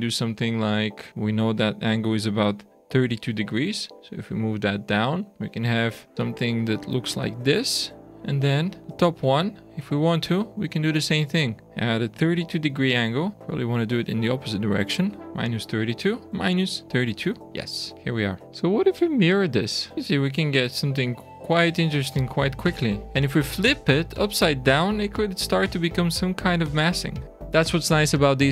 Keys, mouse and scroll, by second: 1.1 click, 5.2 click, 6.0 shift+middle click, 8.8 click, 11.6 click, 13.3 shift+middle click, 13.8 click, 15.2 click, 16.3 click, 17.9 shift+middle click, 19.3 click, 19.9 click, 19.9 shift+middle click, 19.9-21.0 scroll down 2, 23.3 shift+middle click, 27.9-28.5 scroll down 2.